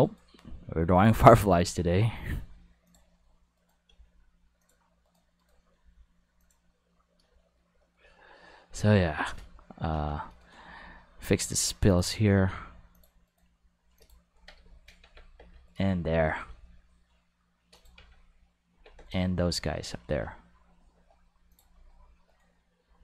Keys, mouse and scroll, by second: 0.0 right click, 0.9 right click, 1.4 g, 2.8 click, 3.5 right click, 3.9 g, 4.6 click, 5.0 right click, 5.4 right click, 5.7 g, 6.4 click, 10.4 right click, 10.5 g, 11.9 click, 12.1 right click, 12.3 g, 12.9 click, 13.2 right click, 13.4 g, 13.9 click, 14.3 Tab, 15.0 Tab, 15.6 click, 16.3 g, 17.7 click, 17.9 Tab, 18.7 Tab, 19.0 right click, 19.8-21.5 middle drag, 20.1 g, 21.5 click, 21.7-22.3 shift+middle drag, 22.3 right click, 22.8 g.